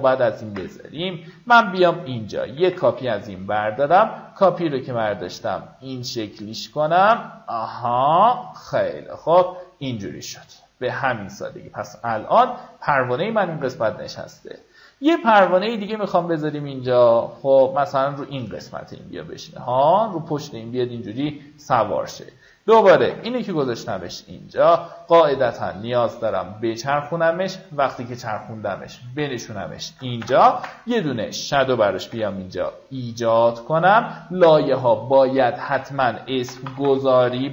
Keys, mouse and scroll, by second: 1.4 click, 5.0-9.4 drag, 10.0 alt+scroll down 1, 11.8 alt+scroll down 1, 12.4-12.9 alt+scroll down 2, 16.0-18.7 alt+drag, 18.9-19.3 alt+scroll up 2, 19.8 alt+scroll up 1, 20.4 click, 22.5 click, 24.9 click, 30.5 ctrl+alt+shift+n, 33.9 ctrl+click, 34.7 click, 36.0 ctrl+d.